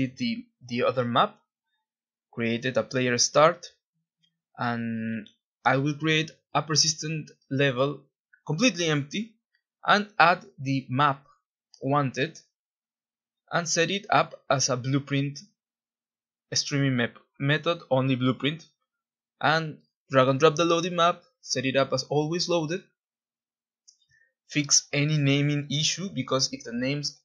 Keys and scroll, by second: 2.1 ctrl+b, 2.9-4.7 typing, 5.2 Return, 13.6 ctrl+s, 17.4 Escape, 19.4 Delete, 20.4 alt+Tab, 23.8 F2, 24.7 ctrl+c, 25.8 F2, 26.5 ctrl+v.